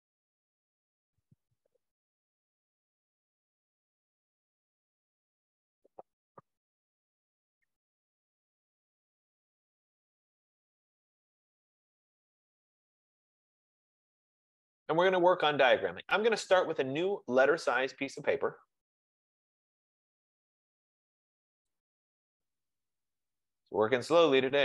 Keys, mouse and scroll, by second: 7.0 F15, 14.1 click, 18.3 click, 22.1 click.